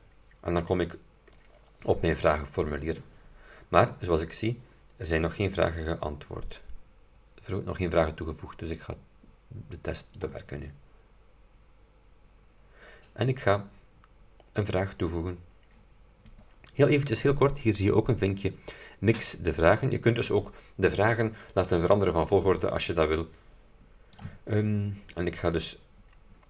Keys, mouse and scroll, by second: 10.3 click, 24.3 click.